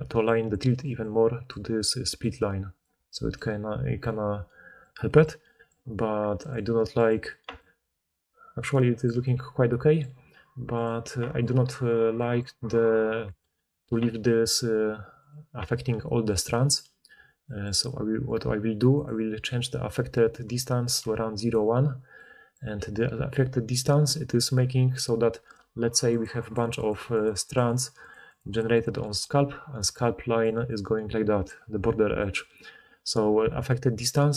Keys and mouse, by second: 2.1 d, 2.7 d, 2.8 d, 6.5-13.3 right drag, 13.3 middle click, 13.8-18.9 right drag, 18.9-21.4 middle drag, 21.4-25.9 right drag, 24.7-27.0 d, 25.9-27.7 drag, 26.0-27.7 right drag, 27.2 d, 27.3 d, 31.4 d, 31.5 d.